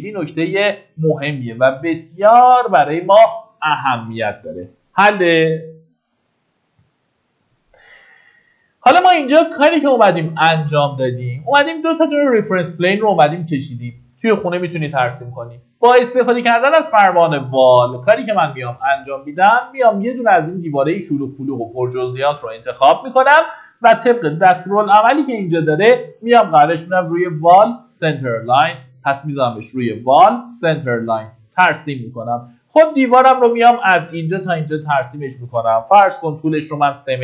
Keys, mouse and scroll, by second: 8.8-11.1 scroll up 1, 11.1 middle click, 14.3-15.2 typing, 24.9-26.6 scroll up 1, 29.1-33.0 drag, 34.2-35.0 scroll down 2, 34.6 middle click, 36.4 KP_3.